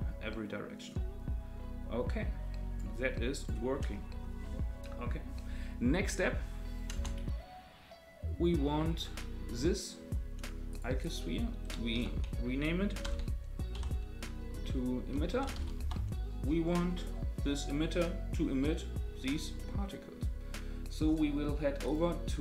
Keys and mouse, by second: 3.4 click, 6.9 space, 8.9 click, 10.7 click, 11.1-16.7 drag, 15.3 t, 21.8 click.